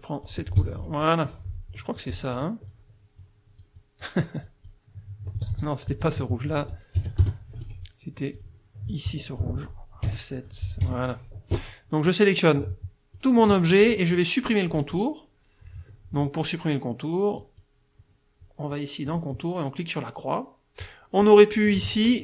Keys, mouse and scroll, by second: 0.2 click, 0.6 F1, 0.8 click, 2.0 click, 2.7 click, 3.6 click, 5.4 ctrl+z, 6.5 ctrl+click, 7.0 ctrl+KP_Subtract, 7.2 ctrl+KP_Add, 7.6 ctrl+F2, 8.4 click, 10.0 F7, 10.5 click, 10.8 F1, 11.0 click, 12.1-13.4 drag, 17.4 click, 19.1 click.